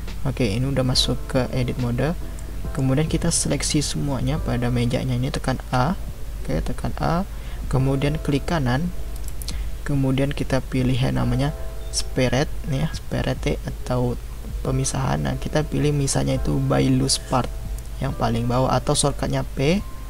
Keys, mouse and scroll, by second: 2.4-5.5 middle drag, 5.5 a, 9.1-12.3 right drag.